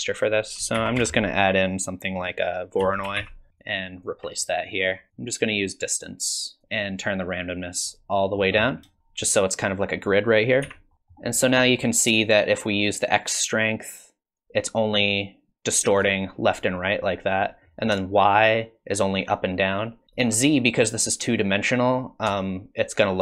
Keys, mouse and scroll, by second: 0.1 click, 0.7 shift+a, 3.6 alt+click, 4.4 click, 5.1 middle click, 6.2 click, 7.0 click, 8.8 shift+middle click, 10.1 click, 10.6 x, 10.9 middle click, 10.9 scroll up 4, 13.2 shift+click, 18.2 shift+click, 22.5 shift+click.